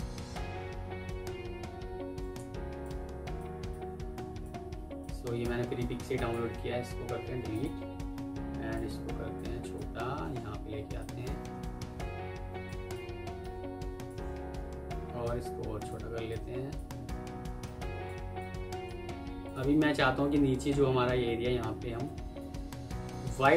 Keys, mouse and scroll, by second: 0.7 F4, 4.5 F2, 5.4 Escape, 6.0 ctrl+click, 7.0 Delete, 11.6 F3, 13.0 Escape, 14.2-14.7 alt+scroll down 1, 19.3 shift+click, 19.6 c, 19.9 Escape, 20.1-20.6 alt+scroll down 1, 20.6 alt+scroll up 1, 21.8 alt+Tab, 22.3 alt+Tab, 23.0 alt+Tab.